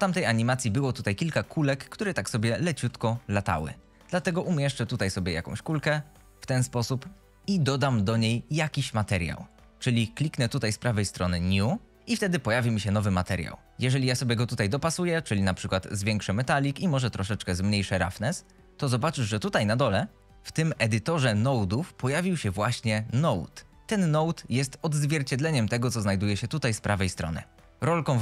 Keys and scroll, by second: 1.0 g, 3.2 z, 4.0 g, 4.3 y, 4.8 x, 5.9 s.